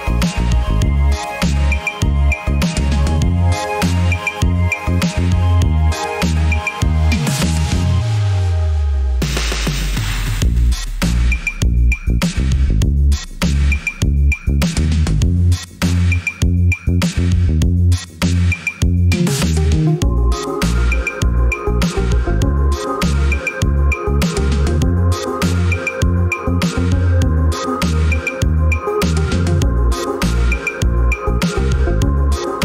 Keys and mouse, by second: 1.0-2.8 drag, 5.9 click, 7.6 click, 8.5 g, 13.3 drag, 16.3-17.1 drag, 20.4-20.8 drag, 23.3 drag, 28.7-29.9 middle drag, 31.0 shift+middle click.